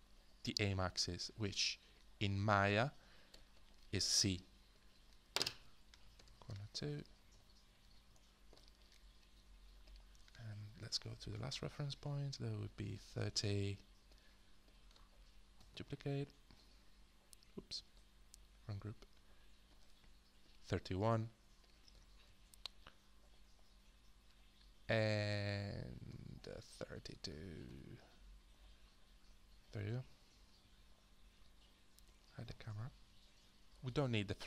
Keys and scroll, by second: 3.3 ctrl+g, 5.7-8.5 typing, 10.6 h, 15.6 ctrl+d, 17.8 ctrl+z, 22.2 ctrl+d, 27.7 ctrl+d, 33.0 h.